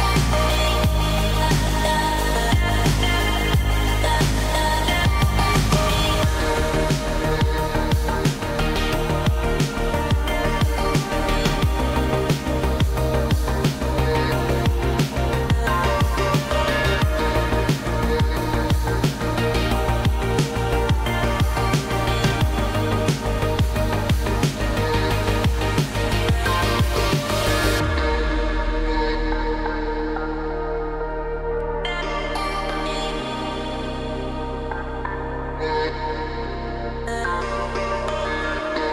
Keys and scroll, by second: 26.4 ctrl+d.